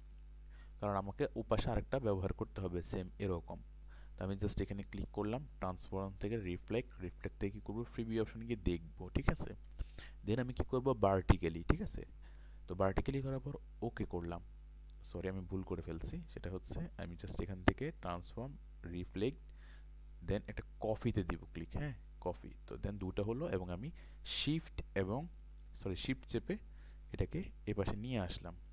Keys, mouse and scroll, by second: 3.9 right click, 5.1-10.6 drag, 15.7 ctrl+z, 16.8 right click, 18.0-27.9 drag, 28.3 click.